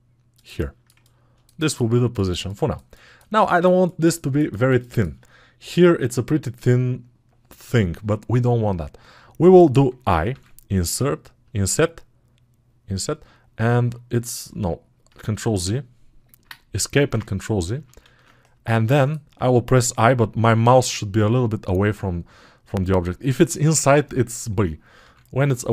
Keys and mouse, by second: 17.0 ctrl+z.